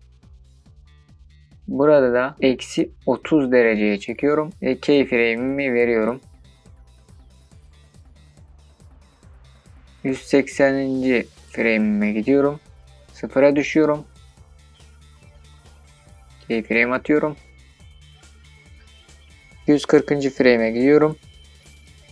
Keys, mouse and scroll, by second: 2.8-8.1 drag, 18.6-22.1 drag.